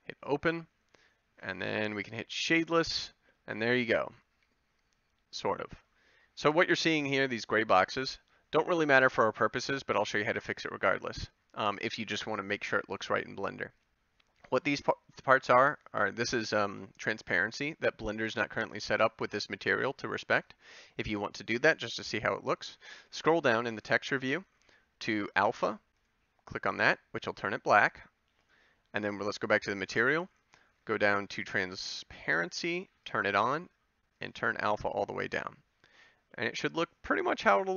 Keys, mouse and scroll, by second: 15.6-20.9 middle drag, 26.3-31.6 drag.